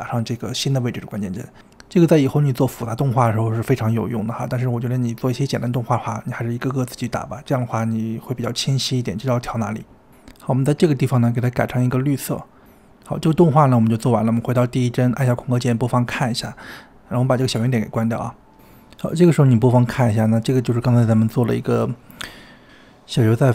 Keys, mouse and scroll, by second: 3.0 click, 5.6 click, 5.9 g, 7.4 click, 8.3-9.4 drag, 9.6 g, 11.0 click, 15.1-18.0 drag, 18.7 space.